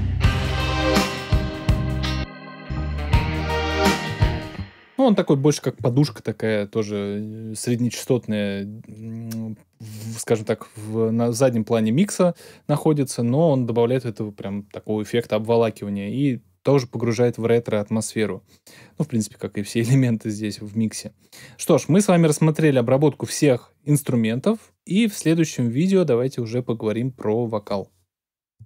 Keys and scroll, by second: 4.1 space.